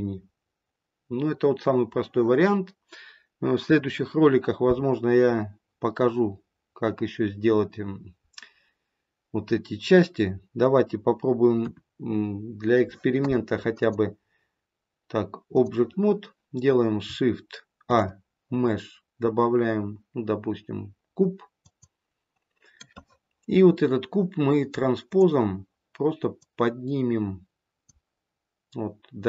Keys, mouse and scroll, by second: 11.5 KP_1, 13.7 click, 17.8 shift+a, 25.0 click, 26.3 click.